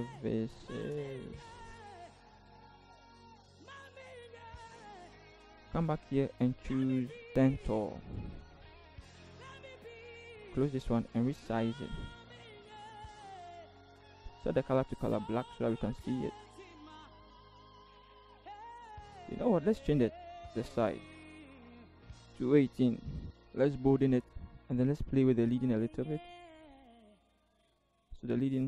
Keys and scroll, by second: 0.0-0.9 typing, 2.4 t, 4.2 ctrl+c, 4.5 ctrl+v, 9.5 ctrl+t, 11.4 ctrl+t, 13.2 Return, 17.7 v, 22.7 1, 22.9 8.